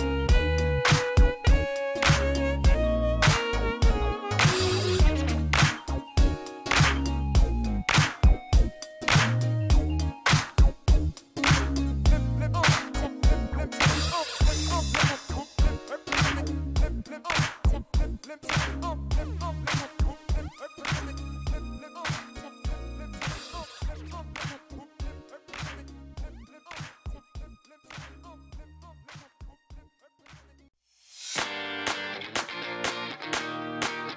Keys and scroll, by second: 0.0-1.0 typing, 3.8 space, 6.9 space, 13.2 shift+a, 13.4 c, 13.6 o, 13.7 l, 15.4 shift+a, 15.7 n, 15.8 o, 15.9 i, 19.1 n, 19.9 0, 29.0-30.9 typing, 32.8 5, 33.1 Return.